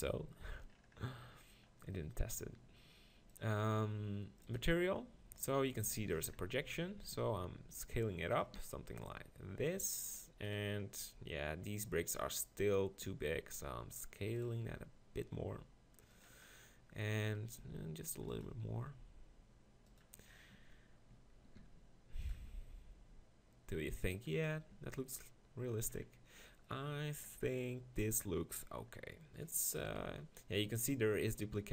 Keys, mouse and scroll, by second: 0.0 click, 0.9-2.6 middle drag, 4.8-6.0 drag, 6.2 middle click, 7.2 s, 8.6 g, 11.0 click, 13.1 s, 14.7 drag, 14.7 g, 15.7-18.2 drag, 17.6 s, 18.7 g, 20.0 click, 20.5 Tab, 21.2 Tab, 21.6 s, 22.5 g, 24.8 Tab, 29.9 KP_1.